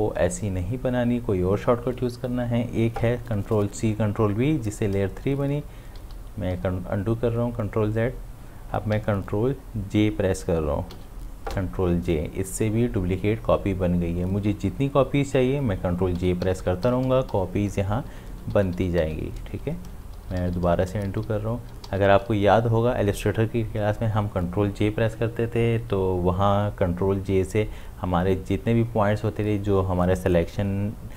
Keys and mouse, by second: 6.0 ctrl+z, 9.4 ctrl+z, 10.9 ctrl+j, 15.8 ctrl+j, 20.1 ctrl+z.